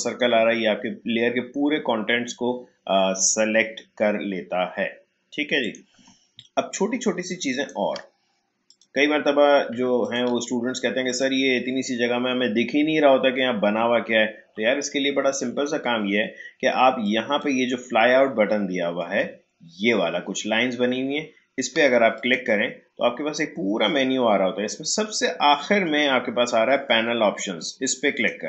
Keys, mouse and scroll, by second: 5.6 click, 6.4-8.6 shift+drag, 10.0 ctrl+click, 17.0-19.7 drag, 19.7 shift+scroll up 1, 21.4 shift+scroll down 1, 22.2 click, 28.1-28.4 drag.